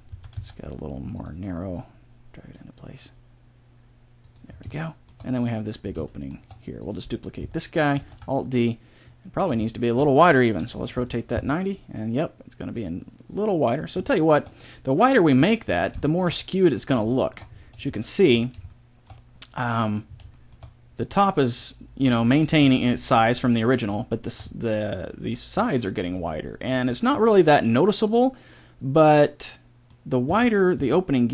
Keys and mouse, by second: 0.1 s, 1.8-3.4 drag, 3.0 g, 4.5-6.8 middle drag, 6.8-8.6 right drag, 8.0 alt+d, 9.6-10.6 drag, 10.6 r, 12.8-14.2 drag, 14.2 middle click, 15.6 z, 20.0-29.0 middle drag, 30.2 s.